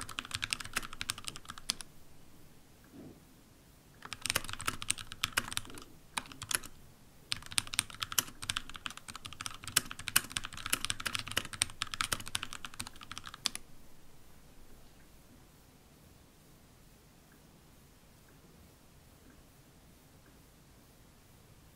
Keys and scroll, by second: 1.4 typing, 4.0-13.8 typing.